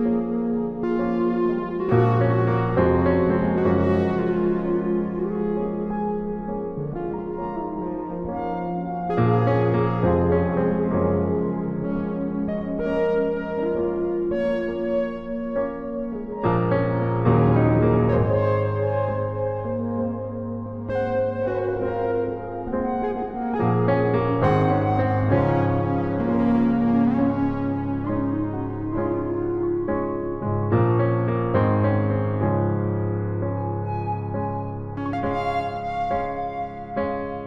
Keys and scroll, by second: 11.6 ctrl+i, 29.0 Down.